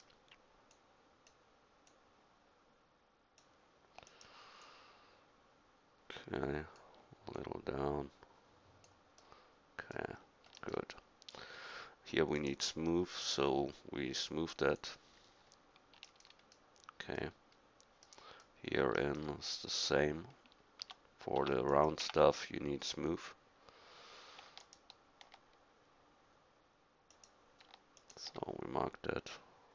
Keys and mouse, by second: 0.7-4.1 drag, 4.6-6.8 middle drag, 7.3-9.3 drag, 9.8-11.0 middle drag, 12.4-13.4 right drag, 15.5-16.7 middle drag, 19.5 middle click, 20.1 middle click, 20.8 Tab, 21.4 Tab, 22.0 Tab.